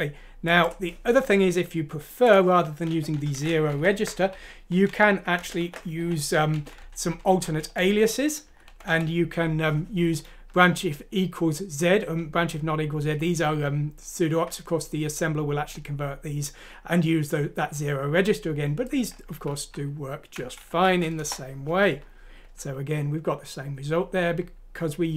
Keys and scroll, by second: 3.3 Home, 3.7-4.3 typing, 4.9 Down, 5.4 Home, 5.6-6.5 typing, 7.5-10.4 typing, 20.7 F6, 21.2 Return.